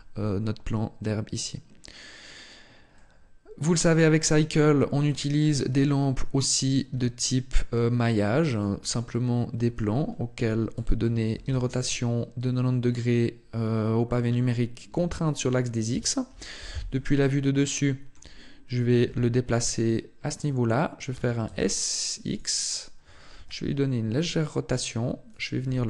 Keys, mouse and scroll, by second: 2.8 middle click, 3.8 shift+middle click, 4.4 middle click, 5.1 shift+middle click, 6.7 shift+a, 10.2 r, 16.4 KP_7, 17.5 shift+middle click, 18.9 g, 20.2 click, 21.0 s, 22.2 click, 23.2 r, 25.2 click, 25.5 g.